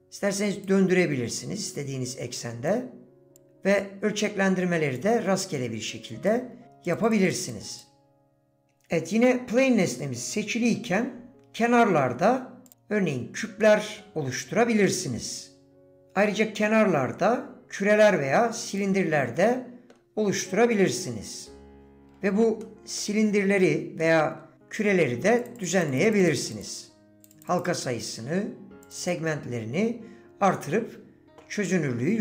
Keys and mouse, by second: 1.4-2.7 drag, 3.8-5.0 drag, 5.6 click, 7.0 click, 7.3 click, 7.7 click, 13.6-14.8 middle drag, 19.4 middle click, 20.9 click, 22.6 shift+middle click, 24.0 shift+middle click, 25.6 click, 25.7 click, 25.9 click, 26.0 click, 26.2 click, 26.4 click, 26.5 click, 27.2 click, 27.3 click, 27.7 click, 28.9 click, 29.0 click.